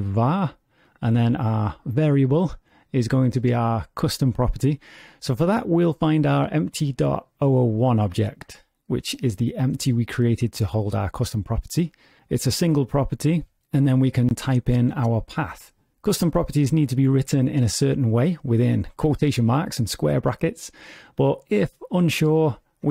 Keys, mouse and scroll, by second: 21.2 click.